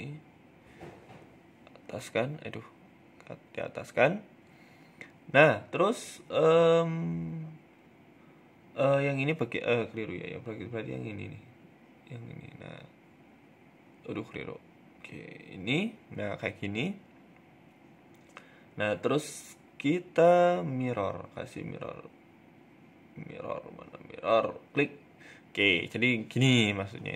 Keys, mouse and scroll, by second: 0.1 click, 0.5-2.7 typing, 5.8 click, 6.8-15.0 click, 15.0 middle click, 15.8 middle click, 17.2 click, 18.5 middle click, 18.7 Tab, 19.0 middle click, 20.5 click, 20.8 Tab, 22.0 Tab, 22.3 click, 24.3 middle click, 24.9 Tab, 25.1 middle click, 26.2 shift+right click, 26.6 shift+middle click.